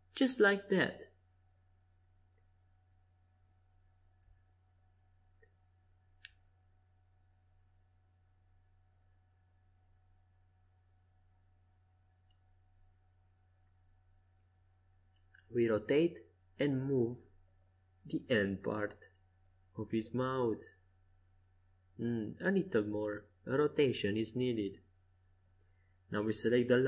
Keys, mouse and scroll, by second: 3.0-4.8 drag, 4.2 Escape, 4.8-8.1 middle drag, 4.9 c, 11.2 r, 15.8-17.2 drag, 17.2 right click, 17.5-20.5 middle drag, 21.7 r, 26.1-26.8 drag.